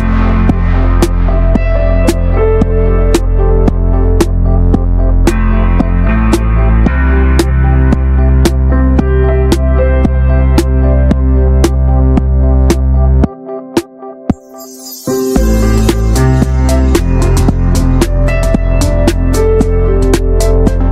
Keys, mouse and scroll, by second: 0.2 click, 0.5-1.2 shift+middle drag, 1.2 n, 1.8 click, 2.0 scroll down 1, 2.2 shift+middle drag, 2.4-3.9 drag, 3.9 Tab, 4.2 middle click, 4.3 Tab, 4.6 alt+z, 4.9 middle click, 5.0 Tab, 5.3-5.6 middle drag, 5.6 Tab, 5.9 alt+z, 6.1-6.6 middle drag, 6.6 n, 6.8 Tab, 7.0 middle click, 7.2-7.8 scroll up 1, 7.8 3, 7.9 click, 8.1 alt+middle click, 8.3 alt+middle click, 8.8 ctrl+s, 9.0-9.5 shift+middle drag, 9.5 click, 10.1-11.4 shift+middle drag, 11.4 click, 12.1 e, 12.6 click, 13.8 shift+middle click, 14.5 click, 15.1 r, 16.8 alt+z, 17.0 click, 17.7 1, 17.8-18.9 drag, 18.9 r, 19.7 click, 20.3 r.